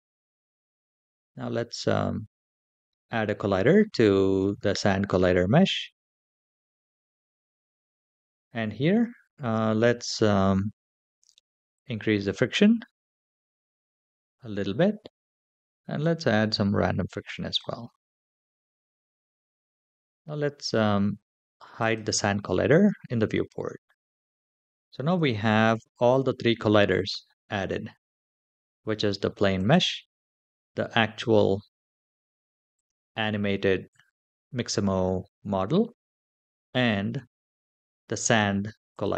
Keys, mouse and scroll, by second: 6.1 click, 11.4-15.1 drag, 15.7-17.4 drag, 21.4 click, 22.7-23.5 scroll down 3, 23.5-23.9 scroll down 1, 23.9-24.5 middle drag, 25.0 shift+middle drag, 29.2 click, 32.4 click, 38.6 click.